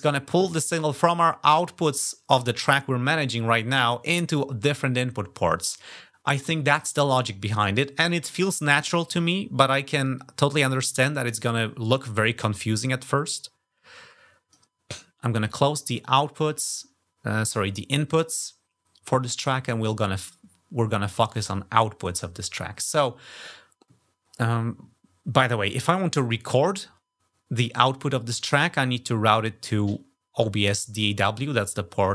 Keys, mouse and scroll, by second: 13.0-14.3 drag, 18.9 click, 19.6-21.2 drag, 24.0-32.1 scroll up 2.